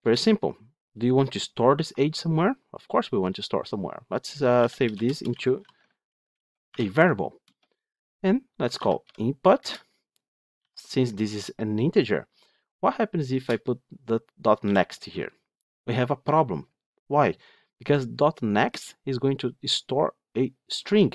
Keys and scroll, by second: 9.5 Return, 14.9 Return.